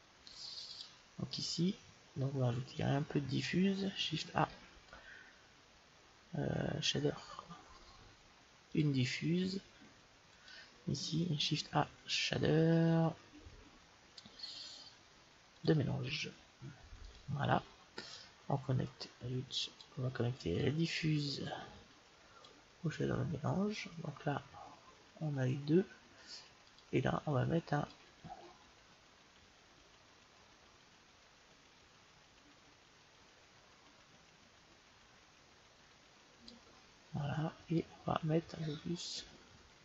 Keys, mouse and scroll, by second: 2.6-4.6 drag, 4.4 shift+a, 11.5 shift+a, 17.1-20.1 drag, 20.5-22.3 drag, 24.4 middle click, 26.7-28.7 drag, 37.8-39.5 drag.